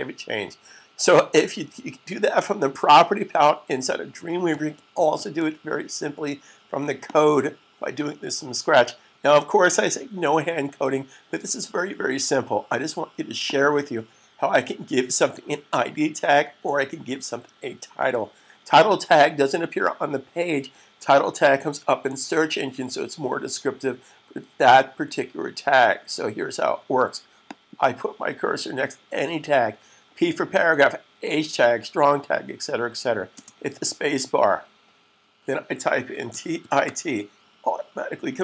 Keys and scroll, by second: 35.9-36.8 typing.